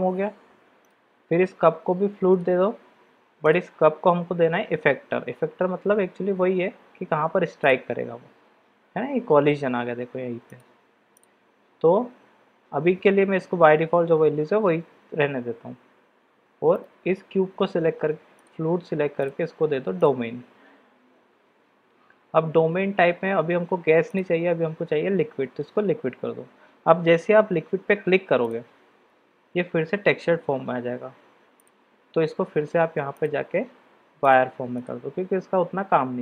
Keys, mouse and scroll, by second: 0.8-1.6 drag, 2.3 click, 3.4-7.8 drag, 10.5 click, 16.7 click, 19.2-20.5 drag, 24.0-28.6 drag, 33.2-34.4 drag, 35.9 middle click.